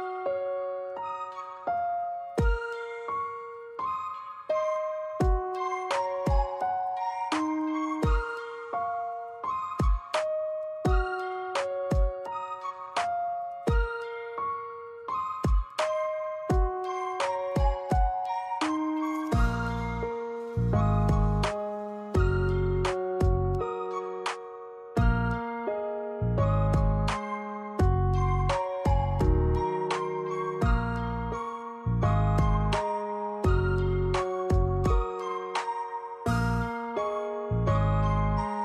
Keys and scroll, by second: 0.8 Escape, 1.2 x, 1.6 l, 3.8 Escape, 6.3 4, 6.7 Return, 20.7-21.7 typing, 21.9 Return, 27.8 3, 28.1 Return, 35.5-36.3 typing.